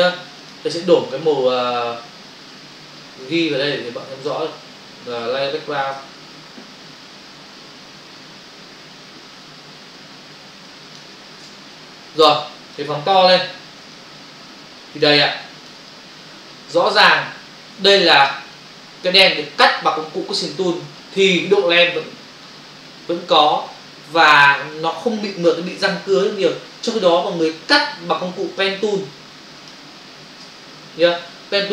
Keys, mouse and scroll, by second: 0.4 click, 3.2 click, 6.0 alt+BackSpace, 10.6 click, 11.5 alt+BackSpace, 12.8 ctrl+space, 13.9 ctrl+click, 15.3 click, 15.8 ctrl+click, 17.8 ctrl+click, 18.0 ctrl+click, 18.5 click, 27.9 ctrl+-, 30.5 ctrl+BackSpace.